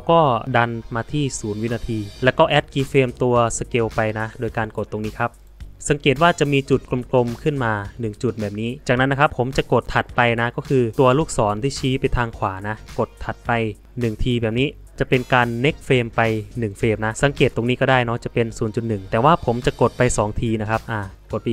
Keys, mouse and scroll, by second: 10.6 Right.